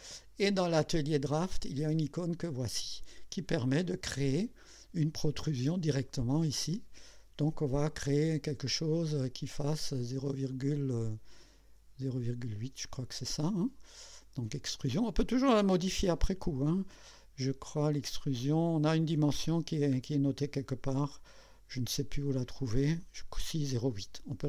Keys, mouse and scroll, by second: 2.4 click, 12.4 click, 14.5 click, 20.0 scroll down 1, 23.0 click.